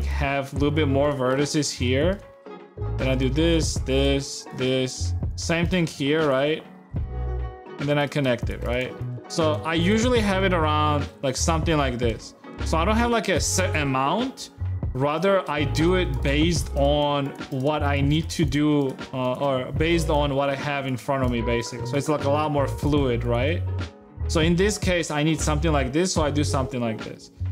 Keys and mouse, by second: 0.8 right click, 1.1 g, 1.9 e, 3.0 e, 4.0 e, 4.9 shift+e, 5.4 shift+click, 5.7 g, 6.7 right click, 7.4 shift+right click, 7.9-9.3 typing, 8.4 click, 9.1 click, 9.8 Tab, 11.2 Tab, 11.9 a, 12.7 a, 15.4-18.9 typing, 15.9 click, 19.7 click, 20.4 shift+g, 21.0 click, 21.3 shift+g, 21.7 click, 21.9 g, 22.5 click, 22.9 shift+g, 23.4 Tab, 23.9 Tab, 25.2 a.